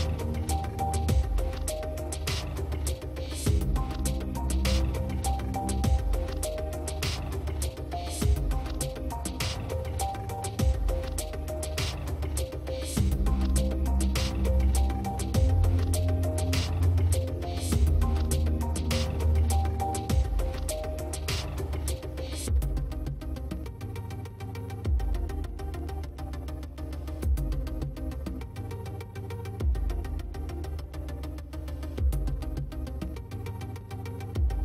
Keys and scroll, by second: 22.3 space.